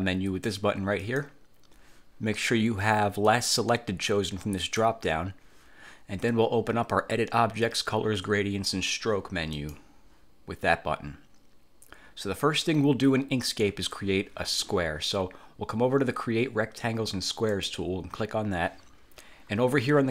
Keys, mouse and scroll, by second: 1.1 click, 3.4 click, 4.7 click, 9.7 click, 17.6 click.